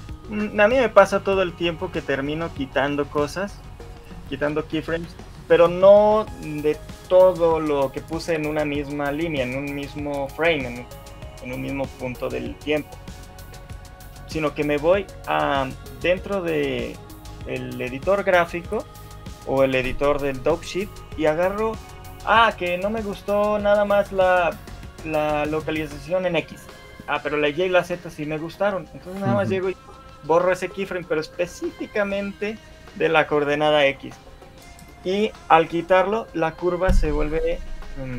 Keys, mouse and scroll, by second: 10.2 click, 12.9 shift+middle click.